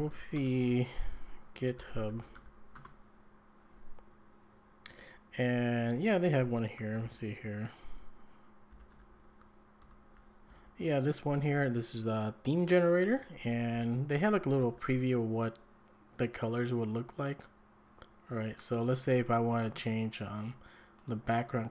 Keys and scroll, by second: 0.0-2.8 typing, 6.9 f, 8.5-11.4 typing, 13.7-14.6 typing.